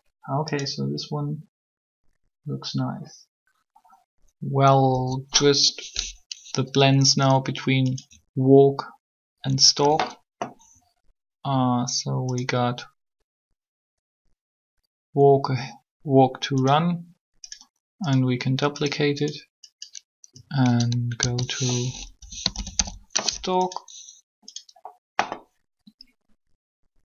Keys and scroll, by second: 4.7 3, 21.1 shift+s, 22.1-22.7 typing.